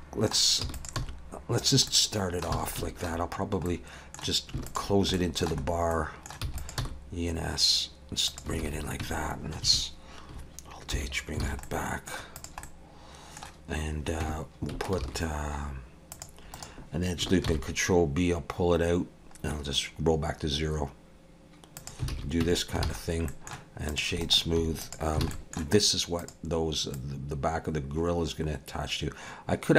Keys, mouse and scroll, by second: 0.6 e, 1.0 s, 1.9 middle click, 2.6 alt+a, 2.8 middle click, 3.7 middle click, 4.7 alt+shift+click, 5.2 shift+middle click, 6.4 e, 6.8 s, 8.6 alt+a, 9.0 Tab, 10.9 alt+h, 11.4 alt+a, 11.6 middle click, 12.4 click, 12.6 middle click, 14.2 Tab, 15.0 ctrl+r, 17.5 ctrl+b, 22.1 alt+a, 22.4 Tab, 22.8 alt+a, 23.0-23.9 scroll down 3, 23.3 middle click, 23.9 click, 24.2 right click, 25.2 alt+a, 25.3 middle click, 25.8-26.2 scroll up 2, 26.2 click, 26.9 click.